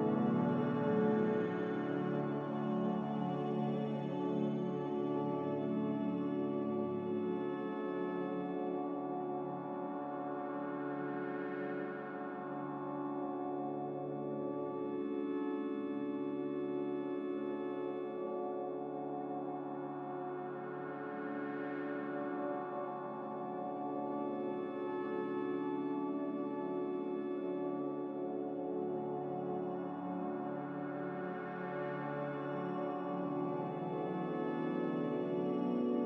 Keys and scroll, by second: 3.0 Escape, 6.2 z, 8.7 z, 10.8 z, 13.9 v, 28.4 z, 31.0 a, 32.5 v.